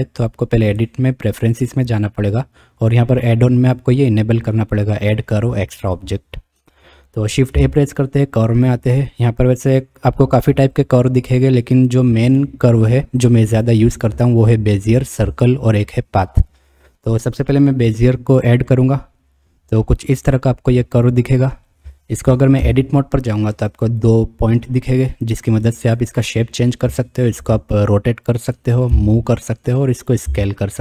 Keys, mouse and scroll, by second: 0.7-2.1 drag, 7.5 shift+a, 19.8-20.2 middle drag, 22.6 Tab, 23.8 click, 24.8-26.0 drag, 27.4 r, 28.9 g, 30.2 s.